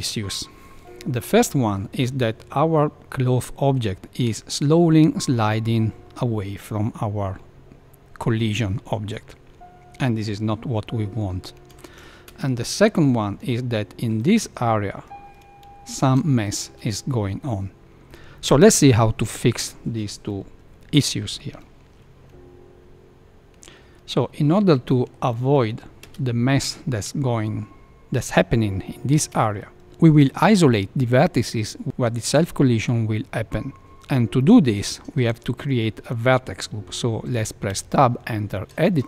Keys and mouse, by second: 2.7-3.7 middle drag, 11.7 shift+Left, 12.2 space, 12.7 middle drag, 14.2 shift+middle click, 15.9 shift+Left, 16.5 space, 18.0 Left, 22.3 space, 23.7 space, 24.8 shift+middle drag, 25.4 middle click, 26.0 space, 29.1 space, 33.8 Tab, 34.5 middle click, 35.0 shift+middle click, 35.3 middle click, 37.7 Tab, 38.8 shift+middle click.